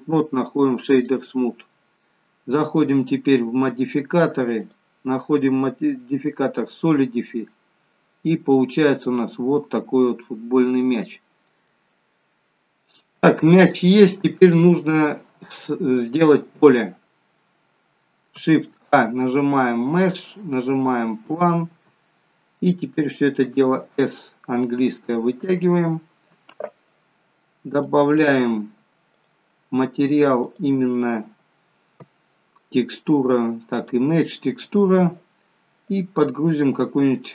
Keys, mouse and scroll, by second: 3.0 click, 9.2 click, 10.1-10.5 scroll up 2, 10.5-11.1 scroll down 3, 11.6 middle click, 11.6-12.0 scroll down 1, 13.1 shift+middle click, 13.1 scroll down 1, 17.0-17.5 scroll down 2, 18.7-20.3 scroll down 4, 18.7 shift+a, 27.6 click, 29.1 click, 31.5 click, 35.8 click.